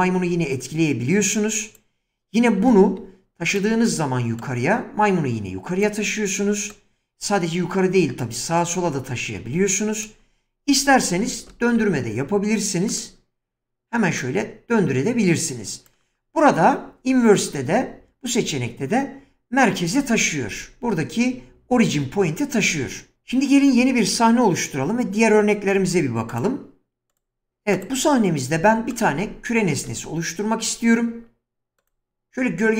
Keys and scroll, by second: 2.7 shift+space, 11.5 shift+space, 25.8 ctrl+n, 28.6 x, 29.8 shift+a.